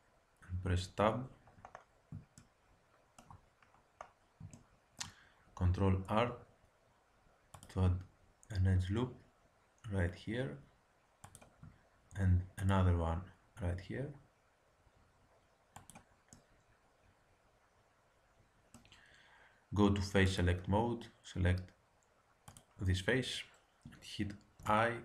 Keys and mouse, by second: 0.7 Tab, 6.0 ctrl+r, 12.1 ctrl+r, 16.3-17.4 middle drag, 20.2-22.1 drag, 22.5-24.2 drag, 24.6 i.